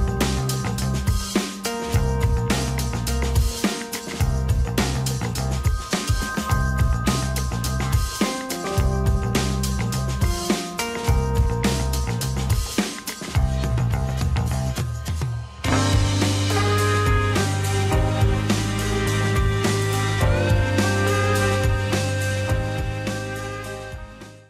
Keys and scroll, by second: 12.4 KP_0, 12.7 KP_6, 13.1 Return, 14.3 KP_Decimal, 14.4 KP_0, 14.6 KP_0, 15.1 KP_8, 16.1 Return, 19.7 Tab.